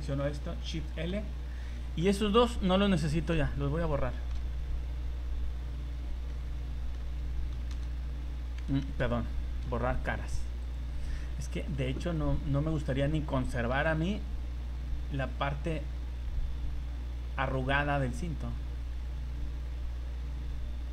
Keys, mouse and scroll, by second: 0.5 shift+l, 1.7 middle click, 2.2-2.6 scroll up 5, 2.7 middle click, 4.3 Delete, 6.3 middle click, 7.5 Delete, 8.8 ctrl+z, 9.6 Delete, 11.0 scroll down 1, 11.3 middle click, 12.9 right click, 13.7 c.